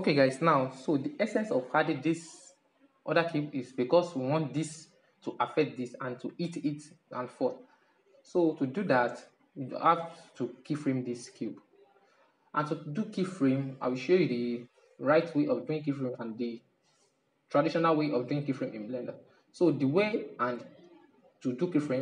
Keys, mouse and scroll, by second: 1.8-3.4 middle drag, 3.4 right click, 6.4-6.7 middle drag, 6.7-7.4 scroll up 1, 7.4-9.4 middle drag, 9.9-12.9 middle drag, 13.4-16.5 middle drag, 17.0-21.5 middle drag.